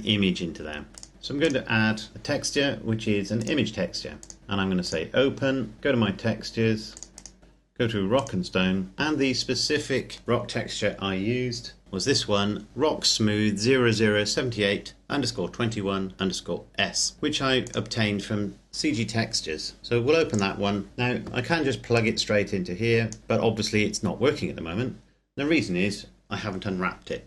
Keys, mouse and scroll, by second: 0.5-0.9 scroll down 1, 0.9 click, 1.0 scroll down 1, 1.1 click, 3.1 click, 4.4-4.8 scroll up 1, 4.8 click, 6.8 click, 8.0 click, 17.4 click, 20.1 click, 21.7 click.